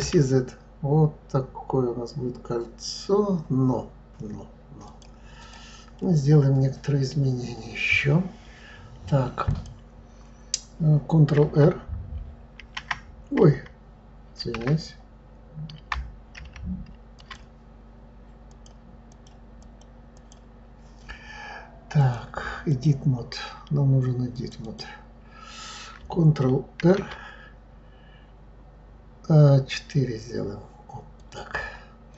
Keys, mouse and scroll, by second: 5.4 click, 5.9-7.4 middle drag, 7.4-8.3 scroll up 4, 9.5 click, 12.6 shift+r, 14.4 shift+z, 16.3 ctrl+z, 17.1 ctrl+click, 18.4 click, 19.1 click, 20.1 click, 21.9-24.4 drag, 24.6 click, 26.8 ctrl+r.